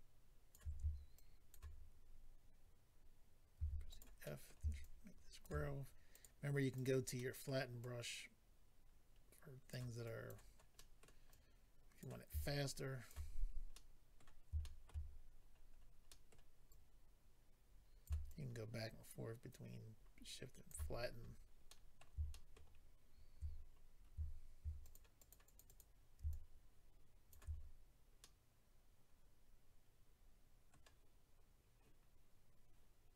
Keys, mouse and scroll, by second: 1.1 shift+click, 3.9 click, 3.9 f, 4.2 middle click, 4.8 shift+click, 6.1 click, 6.7 click, 6.8 click, 7.2 middle click, 7.8 click, 10.0 click, 10.7 middle click, 11.3 click, 12.4 shift+click, 13.1 click, 13.3 scroll down 2, 13.7 middle click, 14.6 shift+middle click, 14.9 middle click, 15.1-15.4 scroll up 3, 16.1 middle click, 16.1 scroll up 1, 16.7 click, 18.2 shift+click, 20.9-22.0 scroll down 6, 21.7 middle click, 22.2-22.5 shift+scroll up 1, 23.5-24.1 scroll up 3, 24.8 click, 25.1 click, 25.5 click, 25.6 click, 26.3 shift+click, 26.5 double click, 27.5-28.2 scroll down 3, 28.2 middle click, 28.2-28.5 scroll down 1.